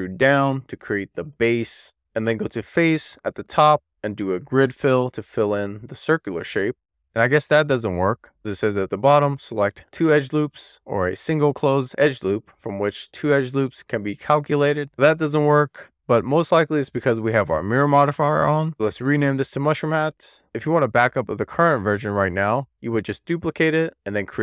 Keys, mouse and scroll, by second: 0.3 middle click, 0.8 scroll down 2, 0.9 shift+middle click, 1.3 right click, 3.7-5.7 drag, 11.7-12.9 shift+middle drag, 13.7-18.7 middle drag, 18.7 click, 19.6 o, 20.4 shift+d, 20.8 right click, 21.8 Tab, 22.0-24.4 drag.